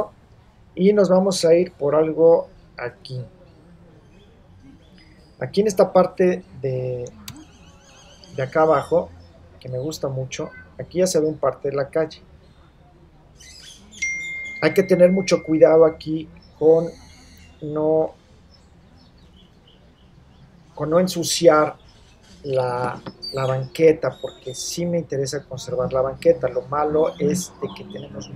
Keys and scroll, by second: 7.3 super+-.